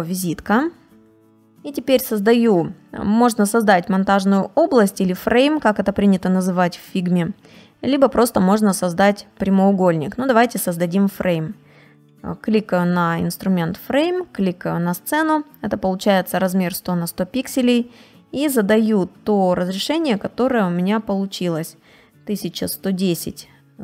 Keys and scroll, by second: 0.1 BackSpace, 21.7 1.